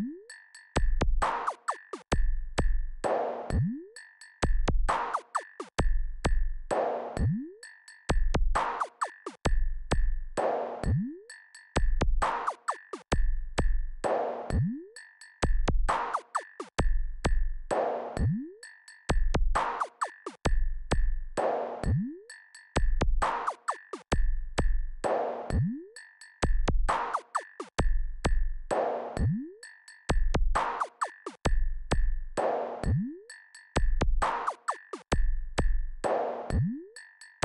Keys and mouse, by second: 0.1 KP_Subtract, 2.5 ctrl+KP_4, 9.3 click, 11.4 click, 23.4 KP_Subtract, 27.6 n, 32.8 click, 35.2-36.3 drag.